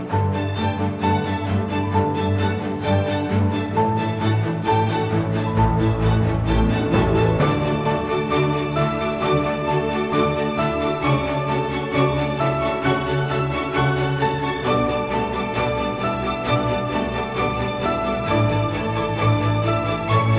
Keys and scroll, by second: 13.0 super+t.